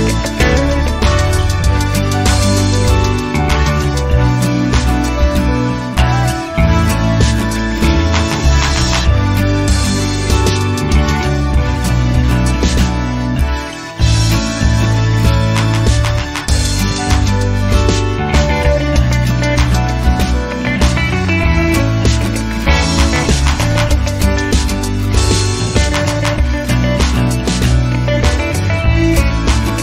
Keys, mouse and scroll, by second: 0.0-0.9 typing, 2.1 3, 2.5 0, 3.6 click, 4.0-4.4 scroll down 1, 5.3 click, 6.7 click, 8.7-10.4 drag, 10.9 click, 13.0 click, 13.5 click, 14.0 click, 15.7 click, 18.6 ctrl+click, 19.8 click, 20.7-24.6 drag, 24.8 0, 27.3 click.